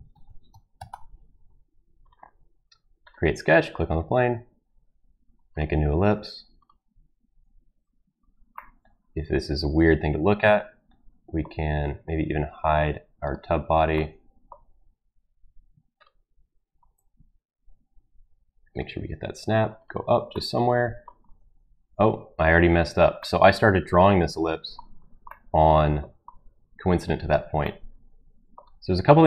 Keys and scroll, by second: 0.1 ctrl+v, 0.5 BackSpace, 0.7 4, 0.9 Return, 22.5 Escape.